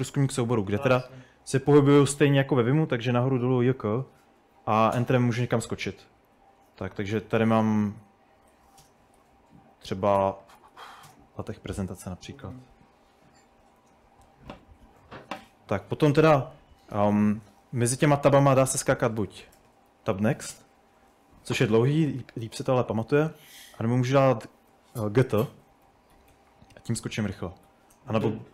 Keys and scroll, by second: 0.0-15.3 typing, 18.4-20.6 typing, 24.1-28.3 typing.